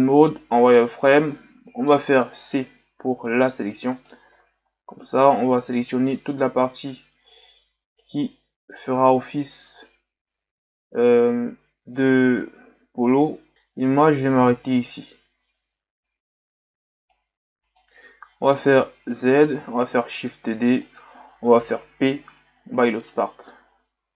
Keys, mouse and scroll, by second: 4.3 c, 18.7 z, 20.3 shift+d, 22.0 p.